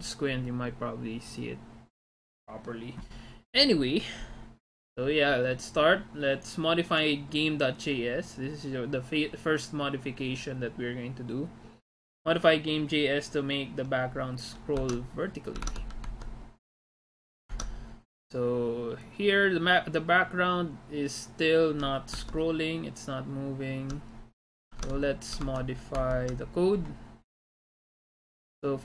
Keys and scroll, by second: 14.9 alt+Tab, 15.7 alt+Tab, 16.1 alt+Tab, 24.9 alt+Tab, 25.5 alt+Tab.